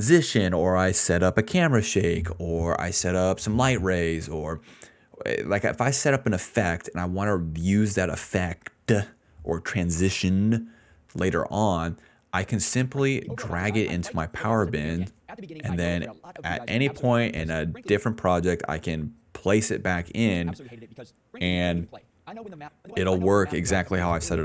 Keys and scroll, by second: 12.1 s, 12.6 ctrl+s, 12.7 space, 13.1 d, 13.9 s, 16.7 d, 16.9 d, 17.9-20.8 typing, 22.6 space, 23.1 space, 23.4 s.